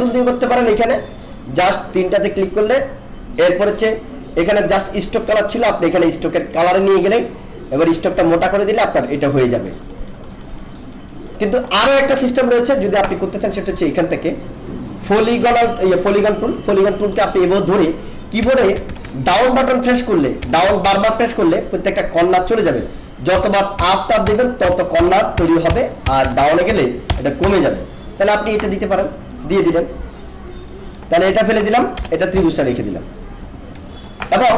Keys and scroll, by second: 18.4 Down, 23.3 Up, 26.0 Down, 31.9 BackSpace.